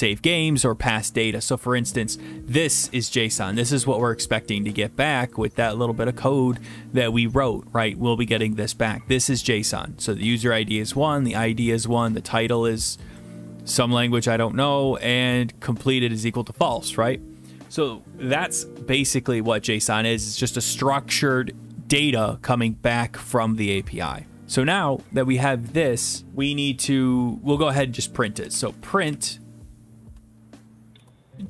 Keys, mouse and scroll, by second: 1.6 click, 3.5 click, 3.7 click, 4.6 click, 4.7 click, 5.3 click, 6.6 click, 9.2 click, 10.2 click, 10.3 click, 12.0 click, 12.0 click, 12.6 click, 13.2 click, 15.1 click, 15.2 click, 15.9 click, 16.1 click, 17.1-21.6 drag, 24.3 alt+Tab, 25.8 click, 27.7 Return, 28.2-29.6 typing, 31.0-31.4 typing.